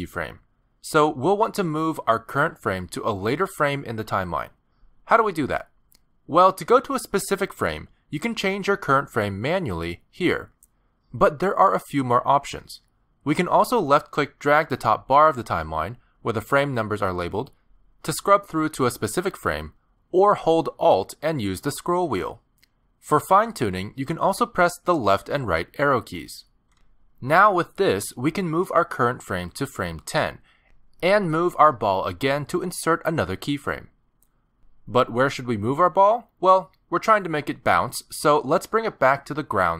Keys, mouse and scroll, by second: 0.9 g, 2.2 g, 9.5 click, 10.5 click, 15.0 click, 21.8-23.4 alt+scroll up 24, 23.4-24.4 alt+scroll down 11, 25.1 Right, 25.5 Right, 26.5 Right, 26.7 Right, 27.0 Left, 27.2 Left, 27.5 Left, 27.6 Left, 27.9 Left, 28.1 Left, 28.3 Left, 29.1 Left, 29.5 Left, 29.8 Left, 30.1 Left, 30.5 Left, 34.0 middle click, 34.6 g, 37.3 middle click.